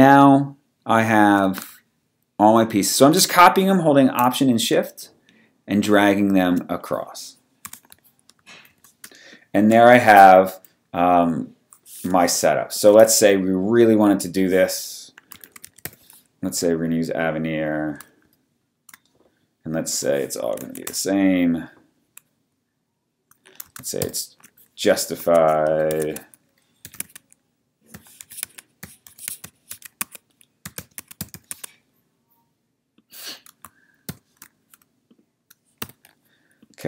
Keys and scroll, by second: 7.6 w, 8.6 w, 8.7 super+-, 9.2 space, 12.2 t, 12.9 super+a, 15.1-16.3 typing, 18.4 shift+super+,, 20.4-21.1 typing, 24.0 alt+shift+super+j, 25.2 Tab, 25.6-31.9 typing, 34.2 shift+super+j, 35.8 v.